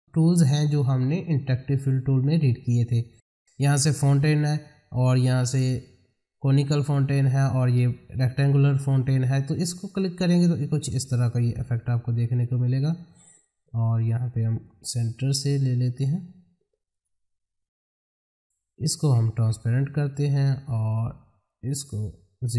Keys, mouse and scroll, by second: 9.9 click, 14.6-16.9 drag, 19.1-22.5 drag.